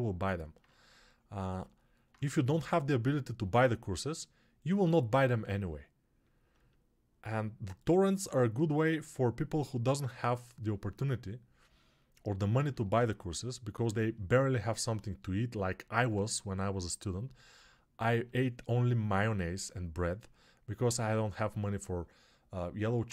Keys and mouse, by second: 12.5 alt+q.